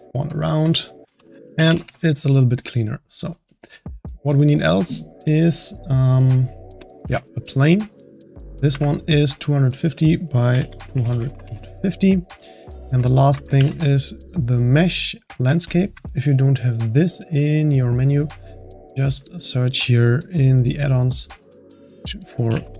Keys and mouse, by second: 0.1-4.1 drag, 4.1 middle drag, 4.3-5.0 drag, 6.8 click, 7.0 shift+a, 8.5-12.4 drag, 12.4-13.5 middle drag, 13.5 shift+a, 17.0-20.7 drag.